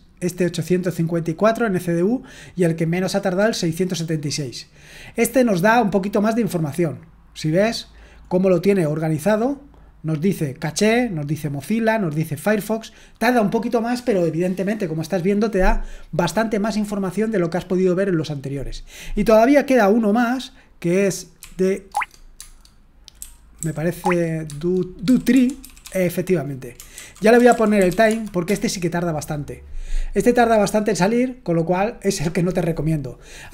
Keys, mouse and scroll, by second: 0.9-2.7 drag, 2.8 click, 3.8-4.8 scroll down 2, 4.8-5.1 scroll up 2, 5.1-6.9 scroll down 2, 6.9-7.5 scroll down 1, 7.5-9.2 scroll down 1, 18.8-19.8 drag, 21.1-28.4 typing.